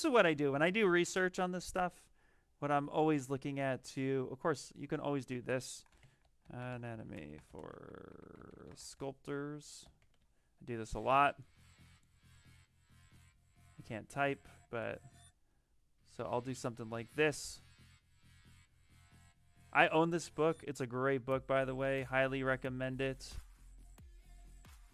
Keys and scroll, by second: 5.3-10.4 typing.